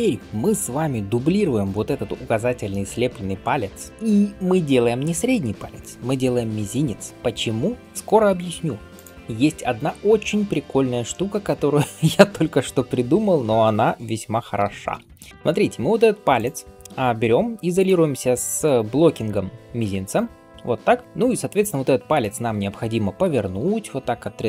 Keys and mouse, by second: 1.6-7.1 drag, 6.6 shift+d, 7.1 right click, 9.1-10.2 middle drag, 9.1-11.9 right drag, 15.3-22.1 right drag, 17.6 shift+click, 17.6 shift+middle click, 18.5 click, 18.5 middle click, 19.1 click, 19.1 middle click, 22.1-24.4 shift+middle drag.